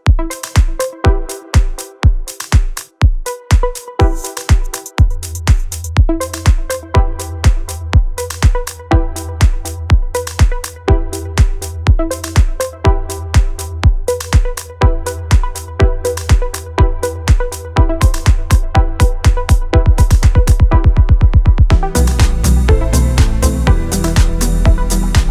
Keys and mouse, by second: 0.0 click, 0.1 middle click, 0.3 KP_1, 0.4 click, 1.5 ctrl+z, 1.7 middle click, 2.5 middle click, 2.6 middle click, 2.7 shift+middle click, 2.9-3.4 d, 2.9 click, 3.3 click, 4.7-6.4 typing, 4.7 click, 5.1 click, 5.9 middle click, 6.1 right click, 7.1 middle click, 7.5 middle click, 7.6 middle click, 8.5 shift+middle click, 9.5 middle click, 9.7 shift+middle click, 9.8 middle click, 11.2 shift+middle click, 12.2 middle click, 12.5 middle click, 12.9 shift+middle click, 13.0 middle click, 13.8 middle click, 14.3 middle click, 14.6 middle click, 14.9 middle click, 15.3 middle click, 16.1 click, 16.6 middle click, 17.3 middle click, 17.7 middle click, 18.7 click, 19.4 KP_1, 19.7 KP_3, 19.9 shift+middle click, 20.4 KP_1, 21.1 shift+middle click, 21.2 shift+middle click, 21.8 middle click, 21.9 middle click, 22.3 alt+middle click, 22.7 middle click, 23.1 Tab, 23.4 shift+middle click, 24.5 shift+middle click, 24.8 shift+middle click.